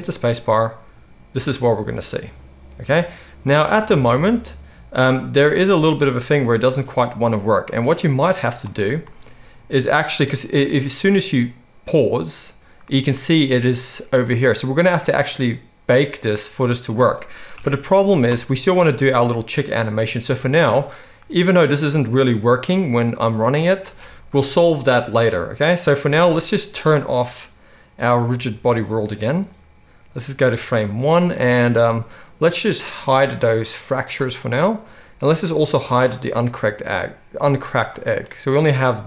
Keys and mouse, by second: 8.8 space, 17.5 shift+Left, 20.3 space, 24.1 space, 29.0-30.2 middle drag, 30.2-34.3 drag, 34.3-36.5 middle drag, 36.5 click, 36.7-38.5 middle drag, 38.5-38.8 drag, 38.8-39.0 middle drag.